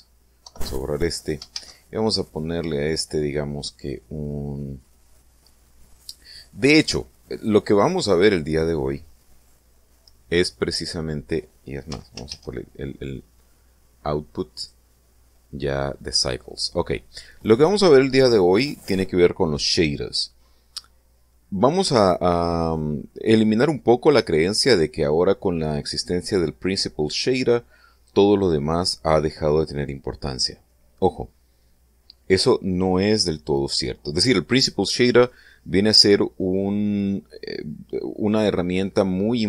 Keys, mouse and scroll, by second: 0.0 click, 0.9 Delete, 2.0 shift+a, 11.3 click, 12.4 x, 12.7 shift+a, 15.1 click, 16.5 click.